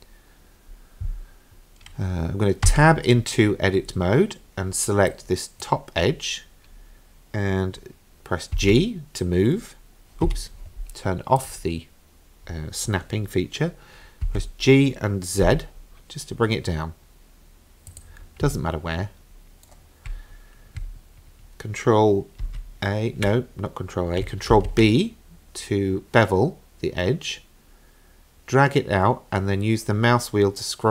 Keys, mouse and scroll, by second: 2.7 Tab, 3.1-3.9 scroll up 6, 5.1 click, 8.6 g, 11.4 click, 14.3 g, 18.6-19.7 shift+middle drag, 22.4 ctrl+a, 24.5 ctrl+b.